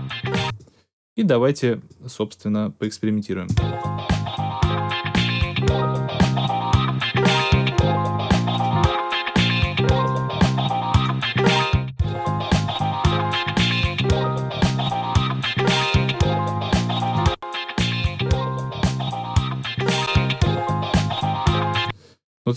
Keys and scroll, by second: 0.3 space, 3.4 space, 21.7 space.